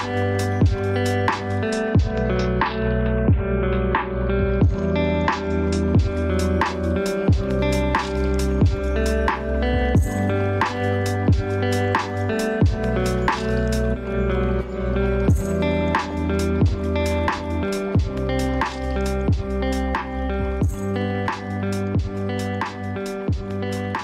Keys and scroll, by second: 0.5 ctrl+space, 17.1 ctrl+space.